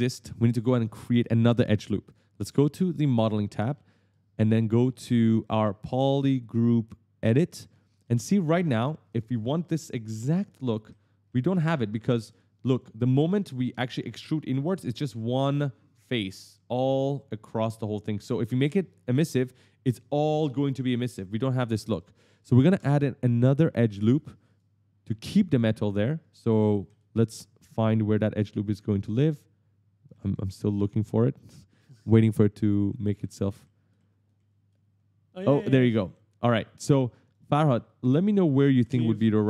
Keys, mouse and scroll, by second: 1.9 click, 2.8 click, 3.5 right click, 3.5 w, 3.7 right click, 6.2 click, 7.0 click, 7.5 right click, 7.7 w, 8.0 right click, 8.4 a, 8.4 right click, 8.9 right click, 10.1-12.0 typing, 10.3 right click, 10.5 right click, 10.8 right click, 11.9 right click, 12.6 right click, 21.8 right click, 21.9 right click, 22.0 right click, 24.3 click, 25.2 right click, 25.3 w, 25.4 right click, 26.1 d, 26.3 right click, 26.6 e, 26.7 right click, 27.6 w, 27.7 w, 27.7 right click, 28.5 w, 28.6 right click, 29.7-31.0 typing, 29.9 right click, 32.3-33.9 typing, 32.5 right click, 32.7 right click, 33.0 right click, 33.3 right click, 33.5 right click, 34.1 right click, 35.8 right click, 35.9 right click, 37.1 right click, 37.5 right click, 37.9 right click, 38.1-38.4 scroll down 1, 38.4 right click, 38.6 right click, 38.9 right click, 39.0-39.3 scroll down 1.